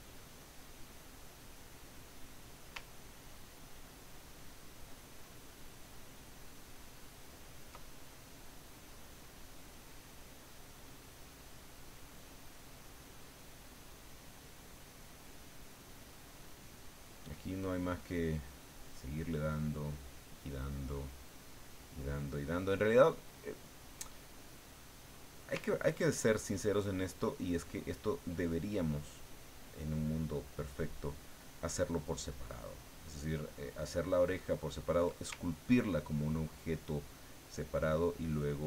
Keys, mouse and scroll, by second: 1.4-2.6 drag, 2.9-5.1 ctrl+drag, 5.2-7.8 ctrl+drag, 7.9-9.2 ctrl+drag, 9.2-12.9 drag, 24.5 click, 25.6-35.0 ctrl+drag, 35.3 ctrl+click, 37.2-38.6 ctrl+drag.